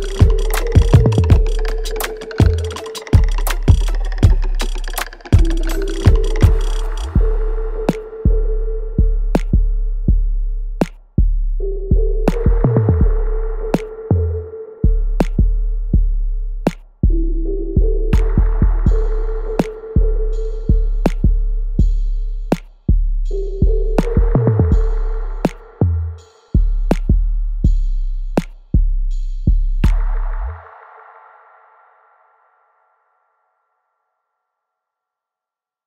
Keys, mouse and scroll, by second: 0.3 alt+right click, 1.4 shift+click, 2.1 alt+right click, 2.5-3.8 alt+drag, 4.5 alt+right click, 4.8 alt+click, 5.2 alt+middle click, 5.6 alt+right click, 6.5 shift+click, 7.3 alt+right click, 7.9 click, 8.9 alt+middle click, 10.1 shift+click, 10.8 alt+right click, 11.2-14.1 alt+drag, 15.4 scroll up 1, 15.7-17.9 alt+right drag, 17.9-22.1 ctrl+drag, 22.1 alt+right click, 23.1 click, 23.1 alt+click, 24.2 alt+right click, 25.0-28.2 alt+drag, 28.2 right click, 29.1 click, 29.4 alt+click, 31.6 alt+middle click, 32.2-35.0 alt+right drag, 35.5-35.8 alt+drag.